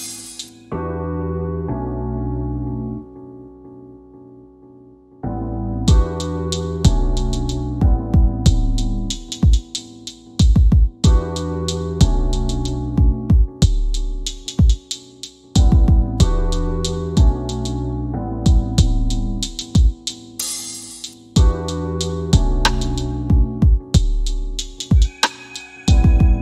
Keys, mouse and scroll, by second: 0.7 w, 5.1 click, 6.5 KP_8, 6.7 KP_Enter, 6.7 KP_0, 8.3 shift+f, 9.1 shift+f, 10.5 q, 12.3 scroll down 1, 25.1 click, 25.9 w.